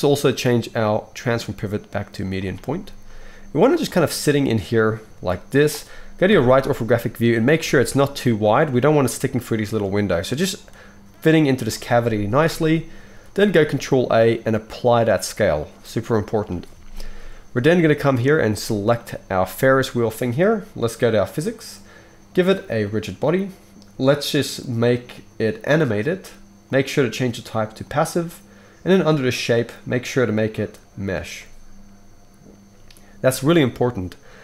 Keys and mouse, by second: 2.9 s, 3.8-21.2 middle drag, 5.1 g, 6.3 KP_3, 7.6 s, 12.0 KP_1, 13.5 ctrl+a, 21.2 click, 21.3-22.8 middle drag, 22.8-25.8 drag, 25.8-26.6 middle drag, 26.6-29.2 drag, 29.2 middle click, 29.5-34.4 drag.